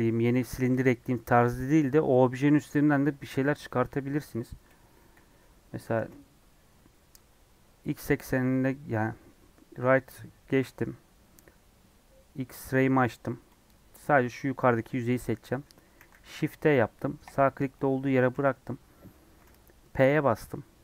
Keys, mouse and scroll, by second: 3.8-4.5 scroll up 2, 4.9 KP_1, 5.2 KP_3, 5.9 alt+z, 14.5 click, 15.9 shift+d, 17.7 middle click, 18.2 alt+z, 18.8 scroll up 1, 20.1 p.